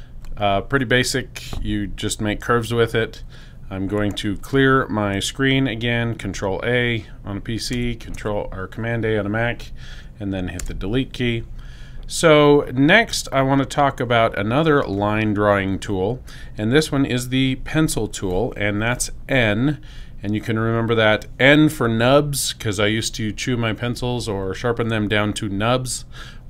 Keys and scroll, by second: 5.6 super+a, 10.5 BackSpace.